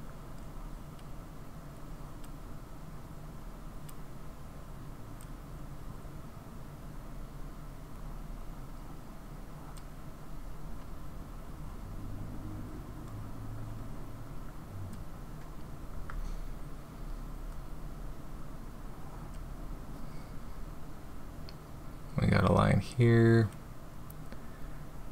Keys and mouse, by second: 0.5-1.0 drag, 1.8-2.2 drag, 3.4-3.9 drag, 4.7-5.2 drag, 5.8 drag, 8.0-9.8 drag, 10.8-14.9 drag, 18.3-19.3 drag, 22.3-23.5 drag.